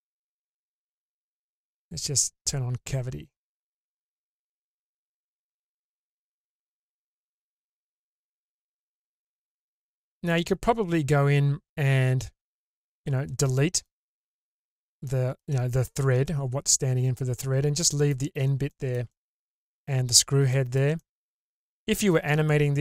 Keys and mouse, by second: 5.6-10.2 middle drag, 11.0-13.0 middle drag, 13.6 middle click, 14.0-14.8 middle drag, 17.8 middle click, 19.1-20.2 middle drag, 21.0-21.7 middle drag.